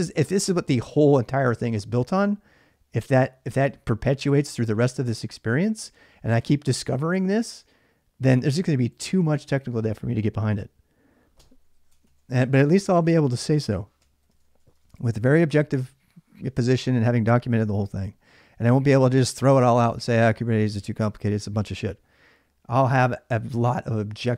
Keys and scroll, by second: 11.7 ctrl+[, 11.7 ctrl+j, 11.8 k, 13.5-14.9 typing.